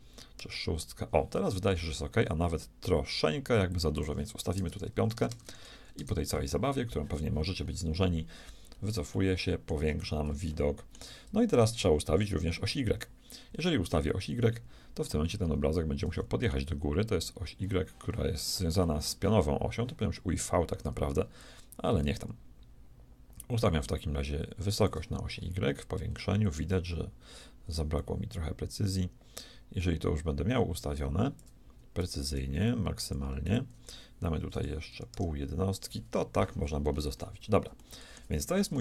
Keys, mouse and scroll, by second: 3.7-5.9 drag, 5.1 BackSpace, 5.3 BackSpace, 7.6-9.4 middle drag, 21.4-23.4 drag, 25.3-28.0 middle drag, 28.0-29.9 shift+drag, 33.1-34.9 drag, 36.9-38.6 middle drag.